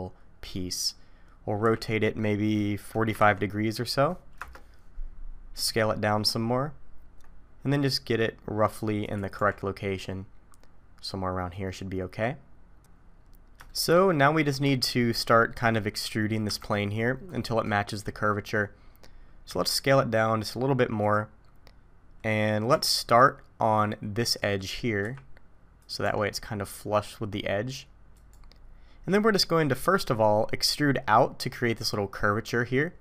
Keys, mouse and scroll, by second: 1.6 r, 5.6 s, 9.4 g, 13.2-13.7 scroll up 3, 13.7 middle click, 14.6 middle click, 14.7 shift+middle click, 15.5 middle click, 16.4 KP_7, 18.9 scroll up 1, 19.5 s, 22.7 g, 25.0 r, 26.0 g.